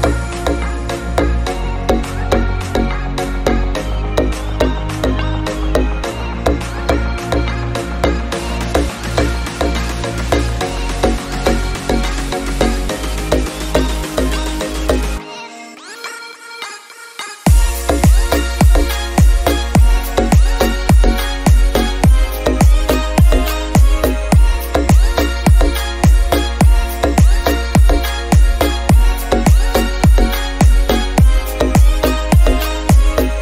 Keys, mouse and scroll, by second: 1.8-2.7 scroll down 2, 2.9 shift+click, 3.3 KP_7, 3.9 click, 3.9 KP_7, 7.5-8.2 scroll up 3, 10.4 scroll down 5, 10.7-11.4 middle drag, 11.4-11.8 drag, 11.8 KP_7, 12.2-13.5 scroll up 4, 12.7 shift+middle drag, 13.5 shift+d, 14.2 r, 15.3 scroll down 1, 15.4 middle click, 16.0-18.3 drag, 18.8 click, 19.3 KP_0, 22.7-23.1 scroll down 4, 23.1 middle click, 23.4-24.3 scroll up 3, 25.0-29.4 drag, 25.1-26.4 scroll down 3, 26.9-27.5 scroll up 4, 29.9 KP_7, 31.1 alt+g, 31.2 alt+r, 32.2-33.1 middle drag, 32.6 click.